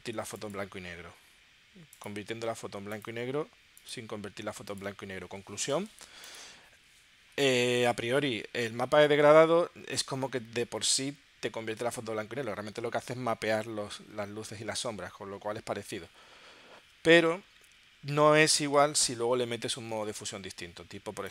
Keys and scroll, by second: 18.9 super+Tab, 20.0 super+Tab.